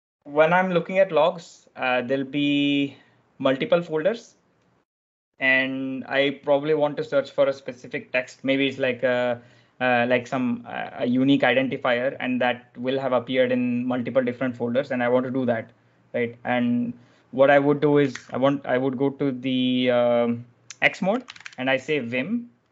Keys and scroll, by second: 1.1 typing, 18.1 shift+;, 20.7-21.8 typing.